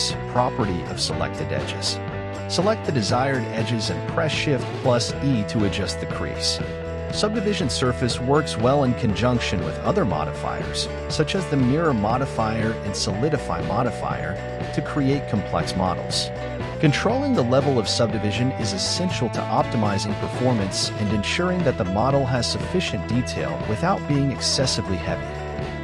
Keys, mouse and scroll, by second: 0.7-4.1 drag, 13.4 click, 17.7 click, 19.7 click, 21.4 click, 23.2-24.7 scroll up 7, 25.2-25.8 shift+middle drag.